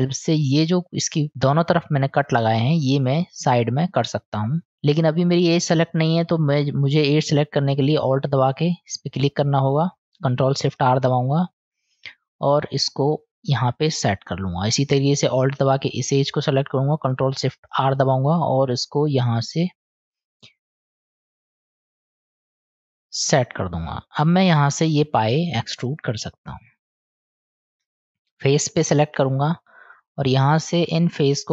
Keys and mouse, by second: 4.6 ctrl+shift+r, 5.0-6.9 middle drag, 6.9 click, 10.8 ctrl+shift+r, 17.8 ctrl+shift+r, 25.8 click, 26.9 click, 29.2 click.